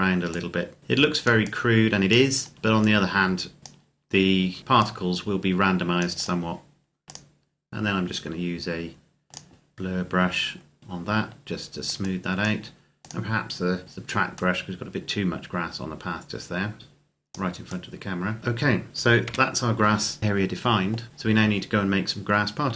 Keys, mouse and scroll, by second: 2.3 scroll down 1, 2.5 click, 6.0 right click, 6.9 click, 10.3-10.8 scroll up 1, 10.8 click, 19.2 KP_0.